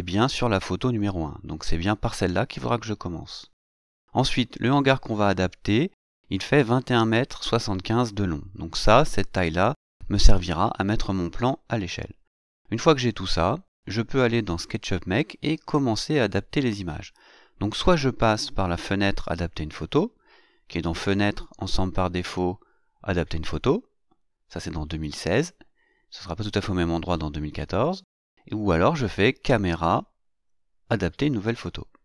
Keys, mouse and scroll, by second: 2.6 click, 12.8 click, 18.5 click, 29.1 click, 31.0 click.